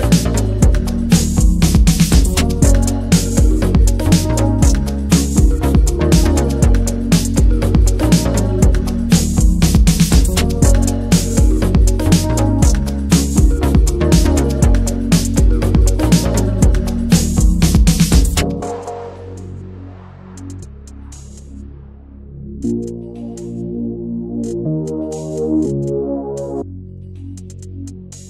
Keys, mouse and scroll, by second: 0.9 s, 2.1 middle drag, 2.6-3.1 middle drag, 3.1 alt+z, 3.4 alt+z, 3.6 middle click, 4.1 e, 5.5 middle click, 5.9 s, 6.8-7.4 middle drag, 7.4 drag, 7.7-8.2 middle drag, 8.2 x, 8.5 middle drag, 8.8 click, 9.0-9.5 middle drag, 9.9 Tab, 10.0 click, 10.3 ctrl+a, 10.8 ctrl+a, 11.4 alt+middle click, 11.6 Tab, 11.9 s, 13.1 ctrl+b, 16.1 middle click, 17.1 drag, 17.3-18.7 middle drag, 18.7 scroll up 1, 18.9-20.9 middle drag, 20.9 Tab, 21.7 click, 22.0 s, 22.9 s, 24.5 middle drag, 24.8 Tab, 24.9-25.7 middle drag, 25.7 i, 26.4 i, 27.3 m, 27.7 Tab, 27.8 click.